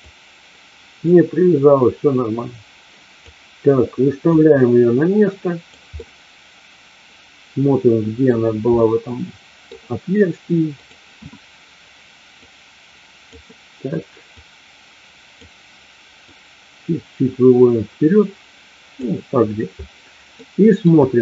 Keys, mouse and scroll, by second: 0.0-3.2 drag, 4.3-5.7 drag, 5.8-8.3 middle drag, 8.8-9.8 middle drag, 10.8 click, 12.3-13.3 drag, 14.4 click, 16.3-19.0 drag, 20.4 middle click.